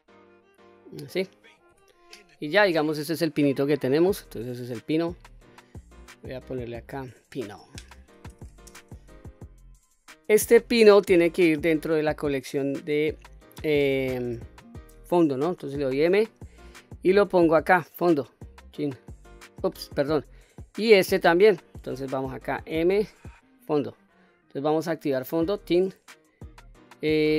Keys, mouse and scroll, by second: 1.3 Tab, 1.8-2.4 scroll down 3, 2.4-3.9 middle drag, 6.3 click, 6.5-9.8 drag, 10.4-11.4 scroll up 3, 11.6-12.5 middle drag, 13.8-14.3 scroll down 1, 14.3-15.5 scroll up 1, 15.6 m, 20.4 click, 22.3 m, 25.1 click, 26.0 scroll down 1, 26.5-27.3 middle drag.